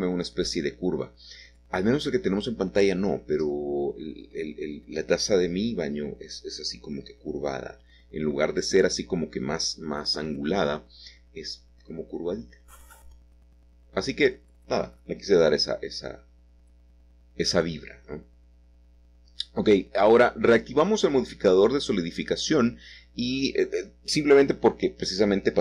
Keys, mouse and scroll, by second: 5.2 click, 6.2 middle click, 13.5 middle click, 14.9 |, 23.7 Tab, 23.9 Tab, 24.4-25.6 Tab, 24.4 typing, 25.0-25.6 scroll down 3.